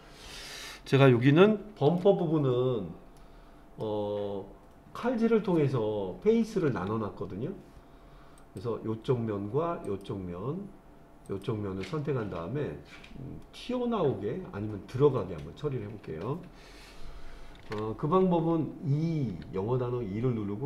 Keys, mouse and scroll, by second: 1.2 shift+middle click, 2.5-3.2 scroll up 1, 3.2 middle click, 19.3 e.